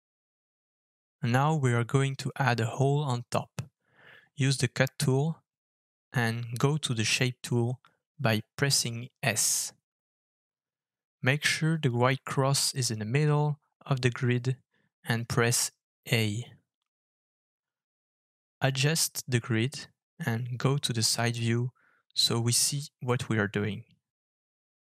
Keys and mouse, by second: 3.6 alt+f, 14.0-24.7 middle drag, 21.8 KP_1, 23.0 KP_3.